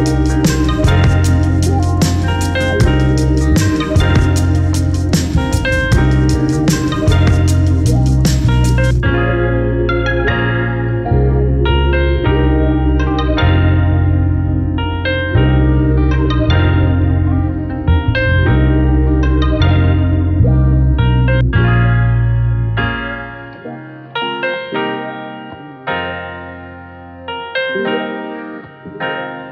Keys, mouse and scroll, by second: 0.8 x, 1.2 `, 3.0 click, 7.7 ctrl+z, 9.6 e, 10.8 scroll down 1, 11.0 Tab, 12.4-14.8 typing, 12.8 scroll up 1, 13.7 click, 15.8 click, 15.9 g, 18.5 `, 20.1-22.0 typing, 21.0 scroll up 1, 21.5 click, 23.6 g, 24.2 click, 24.6 `, 26.7 click, 27.0 `, 27.2 3, 27.4 click, 27.6 shift+click, 28.5 x, 29.0 `, 29.3 ctrl+z.